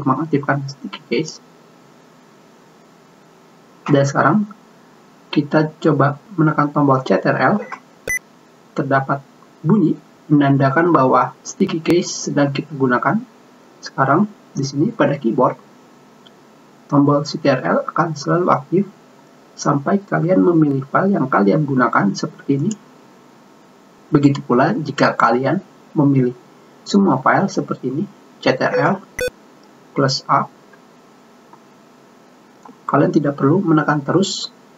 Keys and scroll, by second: 31.3 a.